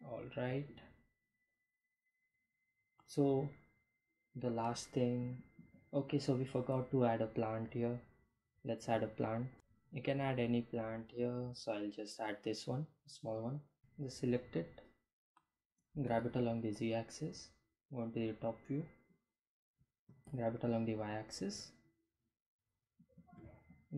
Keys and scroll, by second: 7.2 p, 7.4 a, 7.8 n, 8.0 t, 9.2 BackSpace, 15.5 g, 15.6 z, 18.1 7, 19.3 g, 19.6 y, 22.4 g, 23.4 x.